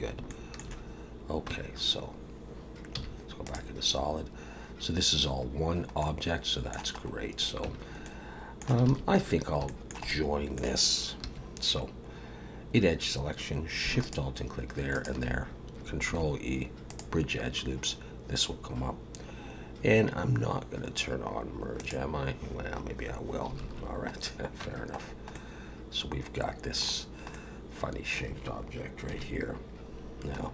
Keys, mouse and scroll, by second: 0.4 shift+middle click, 1.5 Tab, 2.9 z, 5.5 scroll down 3, 6.0 middle click, 7.0 scroll up 2, 7.6 Tab, 8.0 middle click, 8.9 alt+a, 9.2-9.6 scroll up 2, 9.6 shift+middle click, 10.1 middle click, 11.2 2, 14.0 alt+shift+click, 14.9 alt+shift+click, 16.1 ctrl+e, 21.8 click, 23.6 alt+a, 24.1-24.5 scroll down 2, 24.6 Tab, 25.0 scroll down 1, 25.3 middle click, 26.3 middle click, 27.0-27.3 scroll down 1, 27.3 middle click, 29.1 KP_1, 30.4-30.5 scroll up 2.